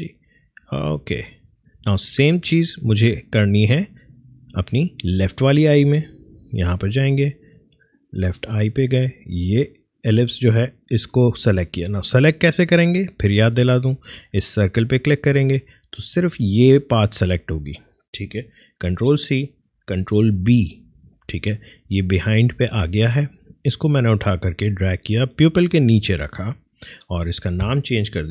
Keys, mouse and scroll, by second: 0.1 scroll down 1, 0.8 scroll up 1, 1.1 alt+scroll down 1, 5.8 click, 14.8 click, 18.2 click, 19.0 ctrl+c, 20.5 ctrl+b, 21.9-26.8 drag.